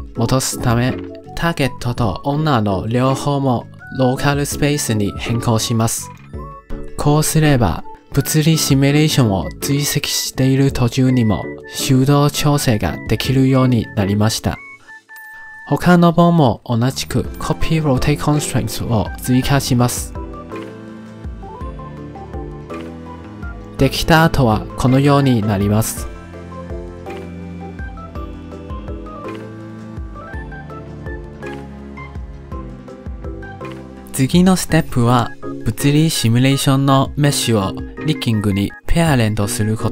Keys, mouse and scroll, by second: 1.6-6.5 drag, 7.6-14.0 drag, 14.3-15.4 drag, 15.8 click, 16.0-17.2 drag, 17.3-18.5 drag, 18.9 click, 19.4-20.0 drag, 20.2 click, 20.7 click, 21.5 click, 22.1 click, 22.7 click, 23.8 click, 25.5-30.0 alt+drag, 30.1-30.7 middle drag, 30.7-31.6 drag, 31.9-33.0 alt+drag, 33.0 middle click, 33.8 drag, 38.6-39.9 middle drag.